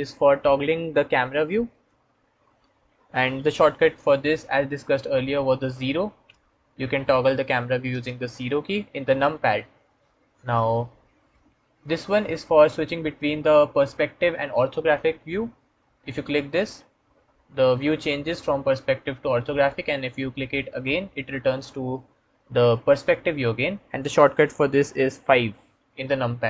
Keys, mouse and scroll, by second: 1.6 middle click, 5.6 KP_0, 6.1 KP_0, 7.3 KP_0, 7.8 KP_0, 10.6 KP_0, 16.3 click, 20.5 click, 25.4 KP_5.